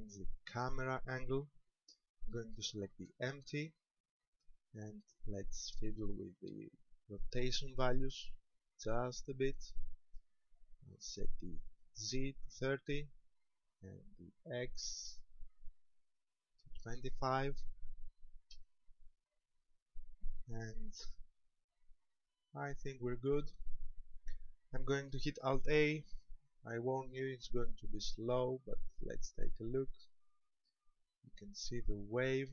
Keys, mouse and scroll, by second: 0.4 right click, 3.1 KP_0, 5.1 click, 8.1 click, 13.3 click, 16.1 click, 19.3-20.7 scroll up 1, 22.2 click, 28.2 alt+a.